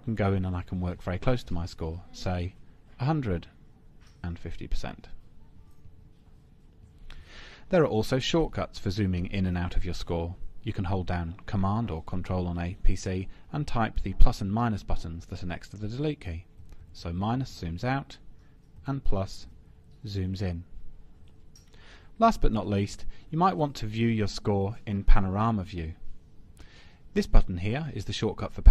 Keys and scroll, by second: 16.7 super+-, 18.8 super+=, 22.9 super+Home.